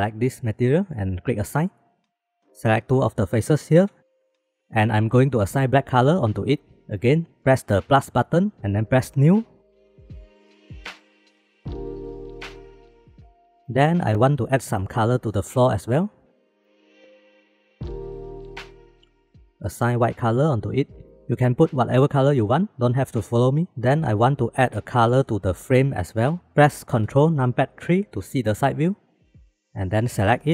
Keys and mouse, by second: 1.9 click, 2.3 alt+z, 2.7 click, 4.1 shift+click, 9.2 click, 13.1 click, 13.7 middle click, 15.0 shift+middle click, 15.5 middle click, 16.5 shift+middle click, 17.3-18.7 shift+middle drag, 20.1 middle click, 21.0 middle click, 21.4 middle click, 21.9 shift+middle click, 23.1 shift+middle click, 24.1 middle click, 28.2 ctrl+KP_3, 29.4 shift+middle click, 29.6 alt+z, 29.8-30.5 drag.